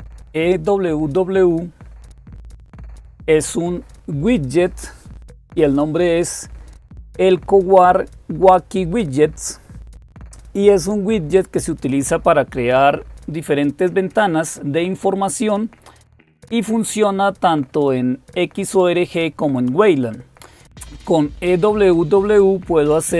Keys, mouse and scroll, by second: 0.5-1.0 scroll down 1, 1.0-1.6 scroll down 1, 1.6-2.7 scroll down 1, 2.7-14.2 scroll down 1, 14.2-15.6 scroll down 1, 22.3-23.1 scroll down 2.